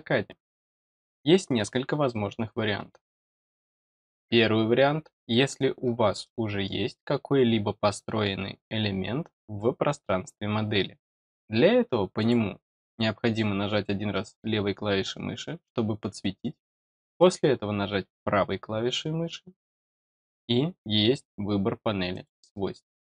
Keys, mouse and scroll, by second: 6.2 middle click, 12.1 click, 17.1 right click, 22.1 click.